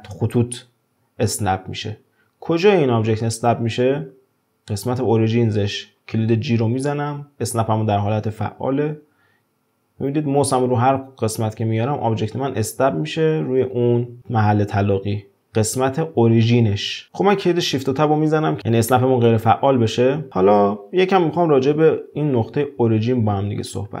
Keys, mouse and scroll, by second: 17.0 click, 18.3 shift+Tab, 18.6-18.9 scroll up 1, 18.9-20.3 shift+middle drag, 20.8-24.0 scroll up 2.